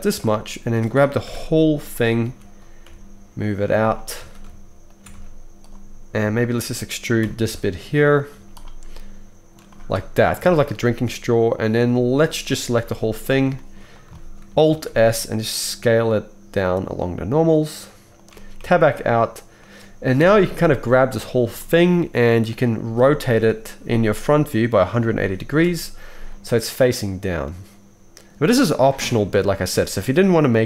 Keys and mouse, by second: 1.2 ctrl+l, 2.2 g, 4.2 alt+a, 4.9 shift+click, 5.1 x, 6.6-19.5 shift+middle drag, 7.3 e, 8.3 z, 12.8 ctrl+l, 14.7 alt+s, 18.7 Tab, 20.1 KP_1, 21.6-26.5 shift+middle drag, 23.0 r, 27.0-30.6 middle drag.